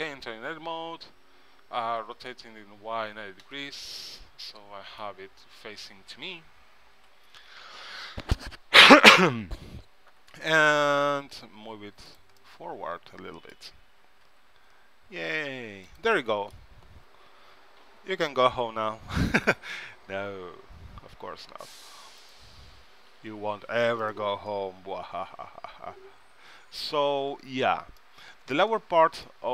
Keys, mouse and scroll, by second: 2.1 r, 4.1 middle click, 6.1 KP_3, 7.1 ctrl+Up, 10.3 g, 12.5-14.3 middle drag, 14.4 g, 17.6 KP_3, 19.7 s, 23.2 s, 24.6 g, 27.3 middle click, 29.1-29.5 middle drag.